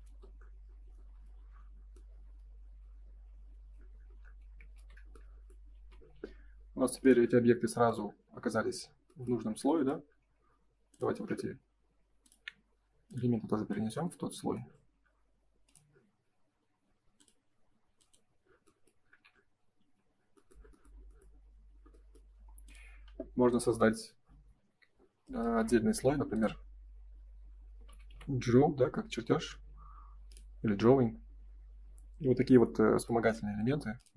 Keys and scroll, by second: 0.0 ctrl+s, 4.7 shift+h, 5.7 ctrl+s, 19.7 ctrl+s, 33.5 ctrl+s.